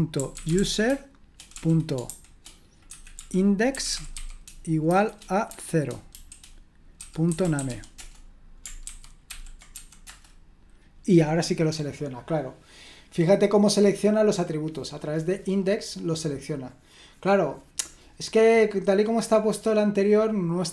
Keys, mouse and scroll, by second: 0.0-8.1 typing, 8.8 ctrl+c, 9.3 ctrl+p, 9.5-10.3 typing.